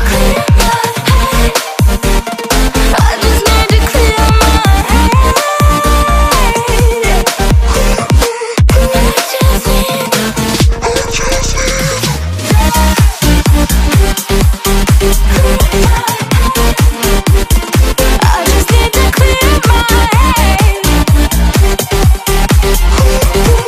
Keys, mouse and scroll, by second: 1.5 click, 8.0 click, 20.6 ctrl+Num_Lock, 20.9 -.